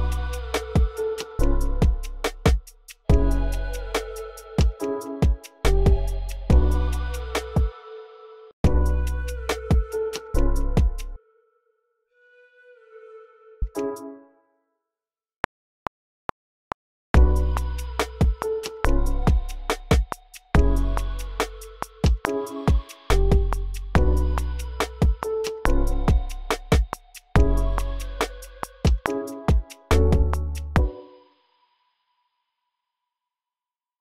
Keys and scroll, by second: 0.0-0.6 typing, 2.7-3.9 typing, 5.3-8.4 typing, 7.7 super+k, 10.9 s, 13.4 s, 13.7 space, 15.3 r, 15.6 super+k, 17.1-17.7 typing, 18.8 t, 19.3 t, 20.4 o, 20.9 o, 22.2-22.8 typing, 23.9 j, 24.4 j, 25.5 t, 26.0 t, 27.3 o, 27.8 o, 30.5 space, 30.8 super+k, 31.3 super+a, 31.9-33.2 typing, 33.6 Return.